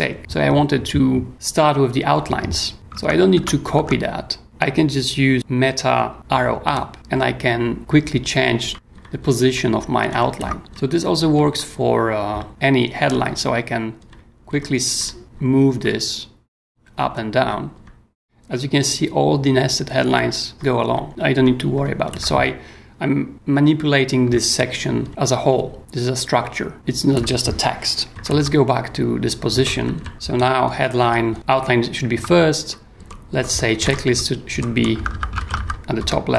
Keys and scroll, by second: 2.7 k, 2.9 Tab, 6.9 super+Up, 7.8 super+Down, 8.3 super+Up, 8.7 super+Down, 8.9 super+Up, 9.4 super+Down, 10.1 super+Up, 10.6 super+k, 12.3 super+k, 13.0 super+Up, 14.0 super+Down, 14.5 super+Up, 14.9 super+Down, 15.2 super+Up, 16.6 super+Down, 17.4 super+Up, 20.1 super+Down, 20.5 super+Up, 21.1 super+Down, 21.3 super+Up, 25.0 super+Down, 25.1 super+Up, 25.5 super+Down, 25.8 super+Up, 28.1 super+Up, 29.5 Escape, 29.8 k, 30.1 j, 30.6 super+Down, 31.0 super+Up, 31.3 super+Down, 33.0 j, 33.5 super+j, 33.8 super+Up, 34.5 super+j, 34.7-36.3 typing.